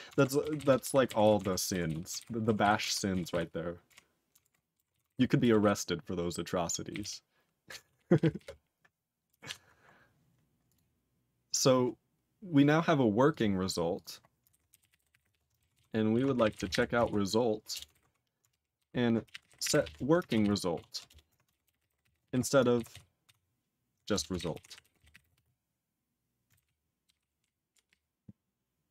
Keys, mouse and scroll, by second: 0.6 ctrl+s, 0.8 ctrl+alt+b, 1.2 ctrl+s, 1.4 ctrl+alt+f, 1.9 ctrl+s, 2.2 ctrl+alt+b, 2.6 ctrl+s, 2.8 ctrl+alt+f, 3.3 ctrl+s, 3.9 ctrl+f, 4.5 ctrl+alt+f, 4.9 ctrl+s, 5.1 ctrl+alt+b, 5.6 ctrl+s, 6.9 ctrl+n, 7.0 ctrl+a, 7.8 ctrl+s, 8.0 ctrl+p, 8.2 ctrl+p, 8.4 ctrl+p, 9.5 ctrl+s, 9.9 scroll down 4, 10.7 click, 10.7 click, 13.3 click, 13.3 click, 13.9 click, 14.0 click, 14.5-17.2 typing, 15.8 ctrl+s, 17.9 alt+n, 18.8 ctrl+/, 19.0-20.3 typing, 20.7 ctrl+s, 21.1 Return, 21.4-22.7 typing, 22.8 ctrl+s, 23.3 ctrl+s, 24.1 Return, 24.3-25.8 typing, 26.6 ctrl+/, 27.0 ctrl+/, 27.4 ctrl+p, 27.9-28.9 ctrl+p.